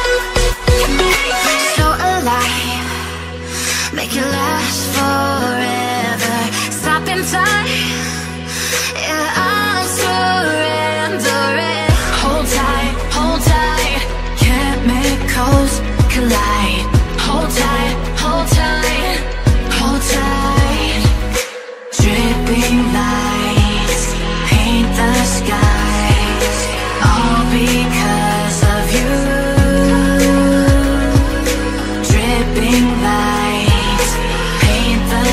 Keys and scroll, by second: 19.2 ctrl+t.